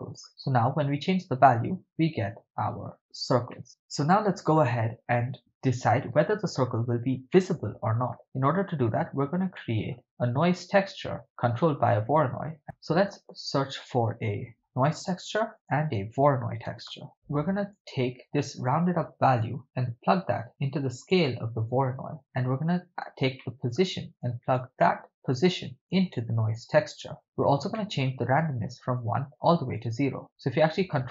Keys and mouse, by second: 0.3 ctrl+middle click, 0.7-2.9 drag, 3.5 shift+middle click, 7.3-8.2 middle drag, 9.6-10.0 middle drag, 12.6 ctrl+middle click, 13.0 shift+a, 15.5 shift+a, 17.1 click, 19.4 click, 19.8-21.2 drag, 23.4-23.8 middle drag, 24.2-24.6 drag, 24.8 middle click, 25.5 click, 26.8 click, 26.9 drag, 27.7-28.1 middle drag, 29.0-29.8 drag.